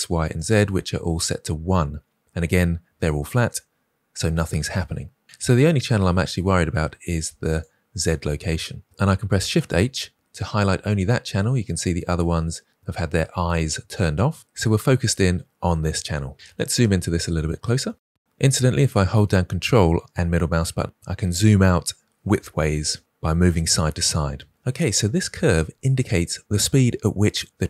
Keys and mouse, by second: 0.3 click, 7.4 click, 9.4 shift+h, 16.4 ctrl+middle click, 16.7 middle click, 17.2 ctrl+click, 17.6 click, 19.3 ctrl+click, 19.5 ctrl+middle click, 20.0 ctrl+click, 20.8 ctrl+middle click, 20.9 ctrl+click, 21.8-22.8 drag, 23.0-24.3 ctrl+drag.